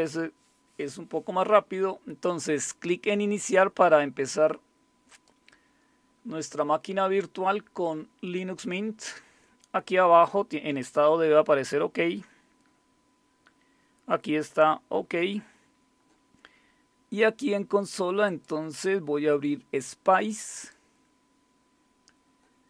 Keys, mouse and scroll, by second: 5.1 click, 14.4 click, 18.2 click, 20.5 click.